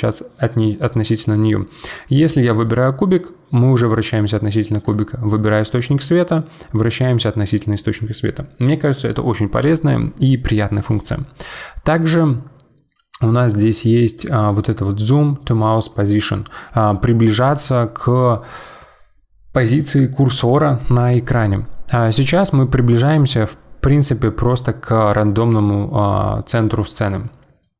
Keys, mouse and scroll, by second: 1.1 click, 2.6-4.8 middle drag, 4.8 click, 5.2-8.4 middle drag, 22.0-22.5 scroll up 4, 22.5-23.1 scroll down 1, 23.1-24.5 scroll up 17, 24.5-26.0 scroll down 14, 26.0 scroll down 1, 26.0-26.7 scroll up 5, 26.7-27.1 scroll down 1, 27.1-27.6 scroll up 2, 27.6-27.7 middle drag.